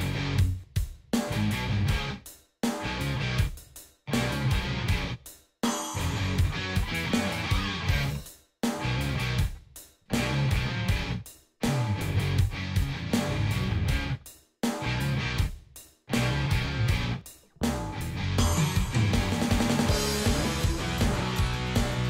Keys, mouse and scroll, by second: 4.6 click, 6.6-8.5 drag, 10.0-11.0 drag, 12.5-13.9 drag, 14.6 click, 15.9-17.7 drag, 18.8 click, 20.2-22.0 drag.